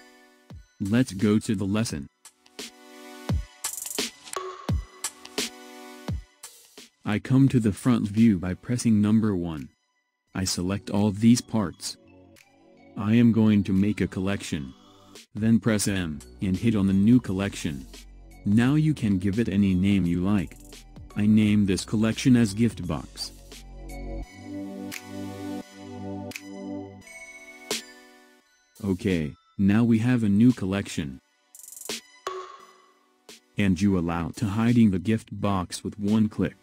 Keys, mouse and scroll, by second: 2.6 click, 4.8 Tab, 5.1 click, 5.8-6.3 scroll down 3, 6.3-7.5 middle drag, 7.5 KP_1, 8.9 click, 10.1-13.2 middle drag, 13.3-14.3 scroll up 2, 14.3 scroll down 1, 15.7 m, 30.5 click, 32.1 click, 34.0 click, 36.3 click.